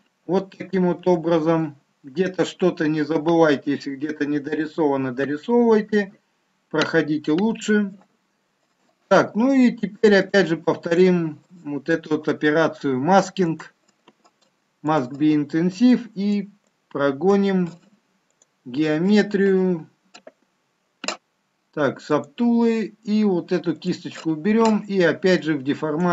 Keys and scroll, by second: 1.1 shift+z, 8.2 shift+z.